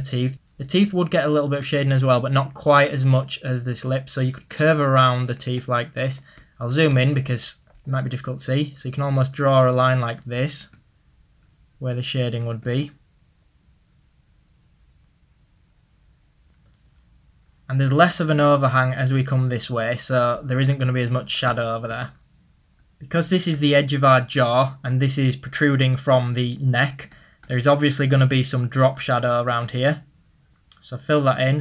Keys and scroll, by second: 6.4 ctrl+z, 19.6 ctrl+z.